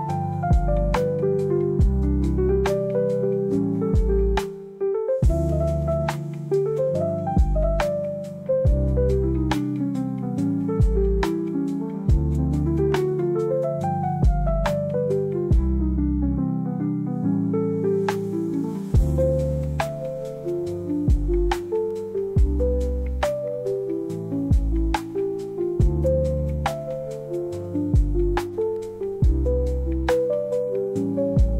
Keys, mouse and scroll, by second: 0.9 space, 2.4 space, 2.8-5.6 drag, 5.8 space, 7.7 space, 8.3-10.1 drag, 10.6 space, 12.8-14.9 drag, 17.8 space, 18.2 drag, 21.5-25.5 drag, 28.4-30.4 drag.